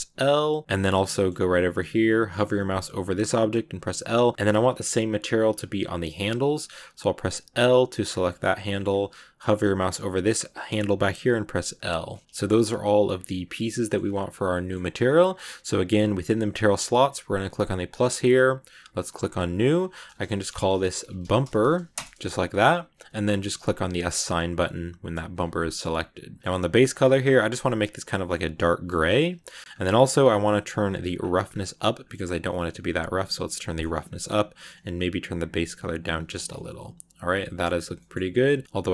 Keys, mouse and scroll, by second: 0.6 scroll up 2, 0.7 middle click, 1.2 scroll down 2, 1.4 middle click, 1.7-3.7 scroll up 1, 3.7 l, 4.0 middle click, 4.3 scroll up 3, 7.9 scroll down 4, 8.1 middle click, 8.8 scroll down 1, 8.8-10.5 scroll up 5, 11.6 l, 11.7 scroll down 2, 12.0-17.5 shift+middle drag, 12.2 scroll up 10, 14.4 scroll up 1, 17.5-19.7 drag, 19.8-25.3 drag, 25.3 scroll down 1, 25.5 middle click, 26.4-26.8 scroll down 3, 26.8 click, 29.3 middle click, 29.5 scroll up 2, 30.1 scroll down 2, 30.7-31.9 scroll down 6, 31.9-33.4 drag, 33.4 middle click, 34.4 click, 36.1 scroll down 3, 36.3 Tab, 36.4-37.6 middle drag, 37.6 scroll up 2, 37.9-38.9 middle drag.